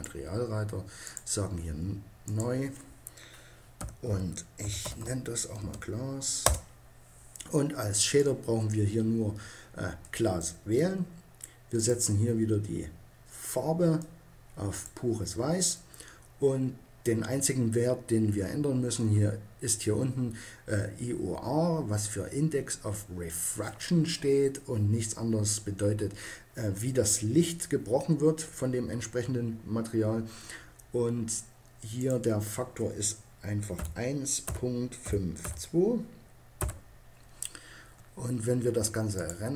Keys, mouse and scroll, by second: 7.9-9.7 drag, 11.5-13.3 drag, 31.7-33.5 drag, 38.9 click.